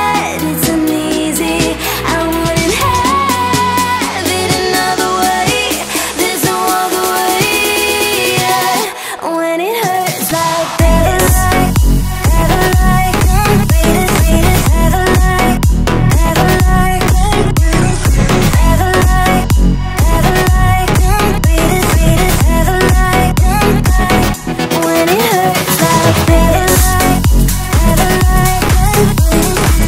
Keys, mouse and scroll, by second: 0.5 r, 1.6 click, 1.8 s, 2.4 click, 2.6 e, 4.3 e, 4.9 r, 5.9-6.9 drag, 6.9 s, 7.4 click, 7.5 s, 8.3 click, 9.2 e, 11.3 r, 12.4 click, 12.7 s, 13.8 scroll down 1, 14.0 shift+middle click, 14.4 click, 14.8 e, 15.6 r, 16.7 e, 17.6 r, 19.3 e, 20.7 scroll up 1, 20.9 scroll down 1, 20.9 scroll up 1, 21.0 shift+middle click, 21.2 click, 21.4-23.9 drag, 23.9 f, 24.4 click, 24.7 s, 25.7 click, 25.7 s, 26.2 click, 26.3 s, 27.1 click, 27.1 s, 27.9 scroll down 5, 28.1 Tab, 28.4-29.8 shift+middle drag, 29.2 ctrl+s.